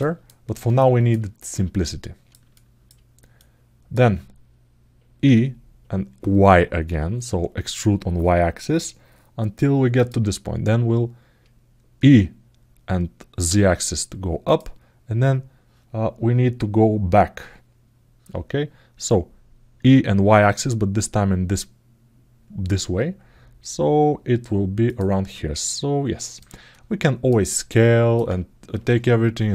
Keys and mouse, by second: 0.6 alt+shift+middle click, 1.6 alt+middle click, 2.3 alt+shift+middle click, 3.2 alt+middle click, 20.5-21.6 middle drag, 25.4 click, 26.5 ctrl+alt+middle click, 27.3 alt+middle click.